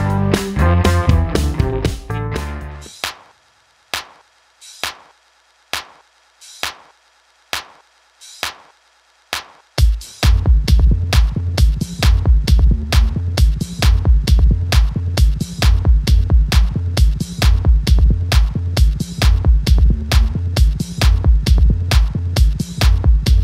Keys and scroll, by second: 7.7 super+c, 7.9 super+v, 15.0 super+c, 15.2 super+v, 19.8 super+d.